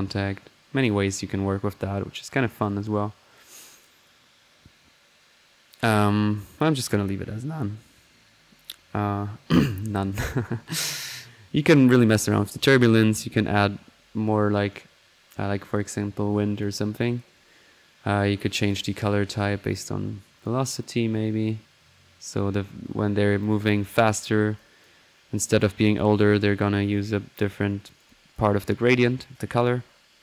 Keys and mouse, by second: 6.3-7.4 drag, 10.9-12.5 drag, 16.5 click, 18.7-19.6 drag, 19.7-20.0 drag, 20.3-22.9 drag, 23.4 click, 24.5 click, 25.3 click, 25.8 middle click, 26.2 click, 26.9 click, 27.8 right click, 28.1 click, 28.6 middle click, 28.8 click, 29.3 click, 29.4 middle click, 29.7 click, 29.9-30.2 middle drag.